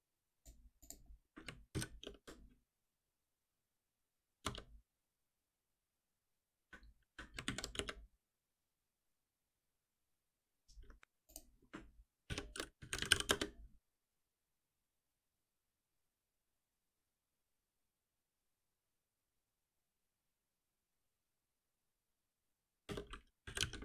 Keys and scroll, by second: 3.4 ctrl+alt+n, 7.4 alt+Delete.